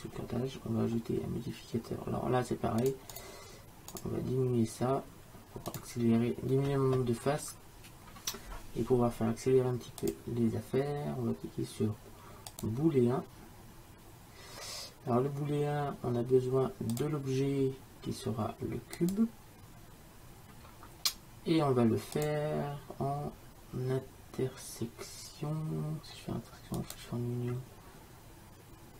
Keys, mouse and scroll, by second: 2.9-7.6 drag, 10.1-12.0 drag, 17.0-18.7 drag, 22.2-24.2 drag.